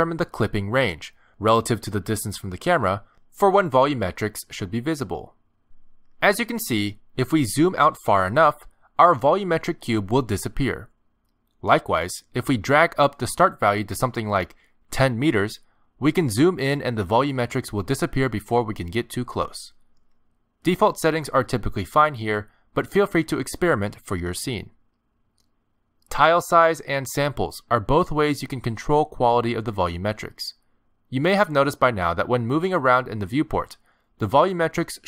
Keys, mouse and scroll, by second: 0.8-1.3 scroll down 3, 1.8 scroll up 3, 2.3 middle click, 2.8 shift+middle click, 3.2 middle click, 4.8 middle click, 6.9-7.6 scroll down 11, 8.9 scroll up 2, 9.3 scroll down 1, 9.7 scroll up 1, 10.1 scroll down 1, 10.5-10.8 scroll up 2, 11.8 ctrl+middle click, 15.1 click, 17.3-18.6 scroll up 9, 18.6 shift+middle click, 19.0 scroll down 1, 19.2-20.3 scroll up 6, 20.5-21.3 scroll down 8, 21.3 click, 25.4 middle click, 26.5 scroll down 10, 27.1 scroll up 2, 28.6 shift+middle click, 29.1 middle click, 29.6 scroll up 1, 29.8 middle click, 32.3 middle click, 34.1 click.